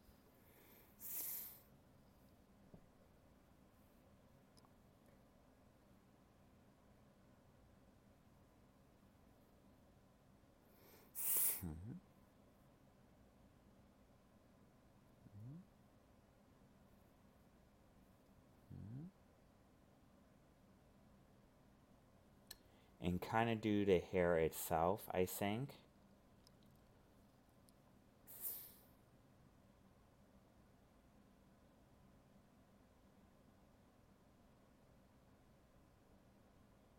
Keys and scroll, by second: 2.7 alt+space, 6.0 alt+space, 7.1 ctrl+z, 9.9 alt+space, 13.0 alt+space, 15.2 alt+space, 16.6 alt+space, 17.8 ctrl+z, 19.0 alt+space, 23.3 alt+space, 29.8 alt+space, 31.2 alt+space, 33.1 alt+space, 34.8 alt+space, 36.2 alt+space.